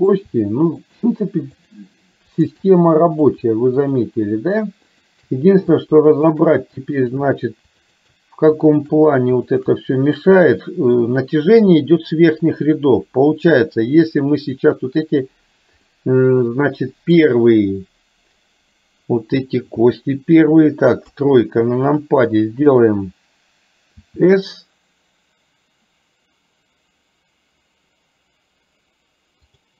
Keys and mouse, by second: 0.9 shift+click, 1.6 shift+click, 2.4 shift+click, 2.9 middle click, 3.9 shift+click, 5.0 shift+click, 6.3 shift+click, 7.1 shift+click, 8.8 shift+click, 9.6 shift+click, 10.1 middle click, 15.9-17.3 middle drag, 21.3 KP_3, 24.0 s.